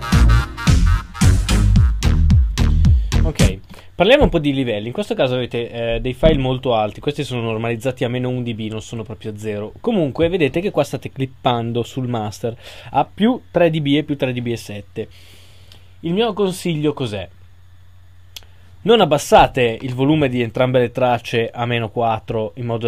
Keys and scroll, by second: 22.3 super+a.